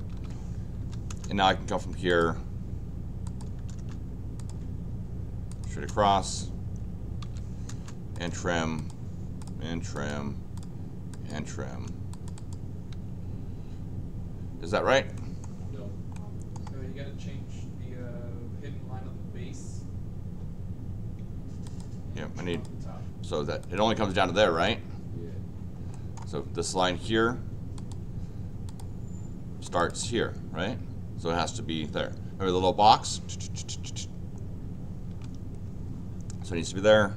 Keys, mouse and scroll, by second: 0.0 Escape, 0.1 Escape, 0.8 l, 1.1 Return, 2.1 click, 3.2 click, 3.6 Return, 3.7 Return, 4.4 click, 5.5 click, 5.7 Return, 6.9-7.7 typing, 8.1 click, 8.8 click, 9.4 click, 9.9 click, 10.5 click, 11.1 click, 11.7 Return, 12.1 click, 12.3 click, 14.5 scroll up 2, 15.1 middle click, 16.1 middle click, 21.6 click, 22.5-23.7 drag, 24.6 Escape, 25.9 middle click, 27.7 click, 28.6 click, 29.6 click, 29.9 click, 35.1 Escape.